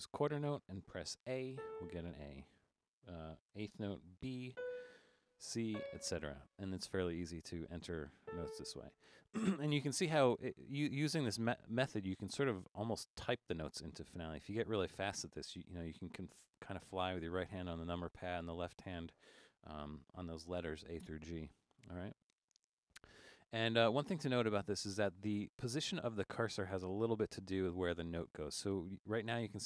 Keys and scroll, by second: 0.1 5, 1.3-2.0 typing, 3.6-4.5 typing, 5.7 typing, 7.1-8.3 typing.